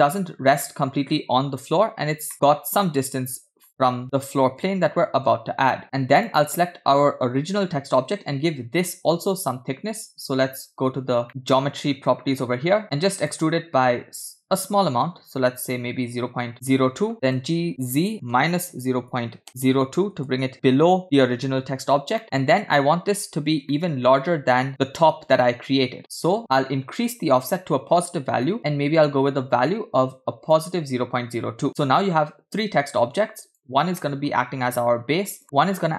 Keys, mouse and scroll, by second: 1.9-2.3 scroll up 3, 2.3-3.7 middle drag, 4.0 scroll down 1, 4.1-5.3 middle drag, 5.3-5.7 scroll up 2, 6.3 click, 13.0 click, 13.5 click, 17.7 g, 22.2 middle click, 23.8-24.4 shift+middle drag, 28.5 click, 30.7 click, 31.6-33.2 middle drag, 33.5 click, 34.0-34.3 middle drag, 34.3 scroll up 1, 35.4 click.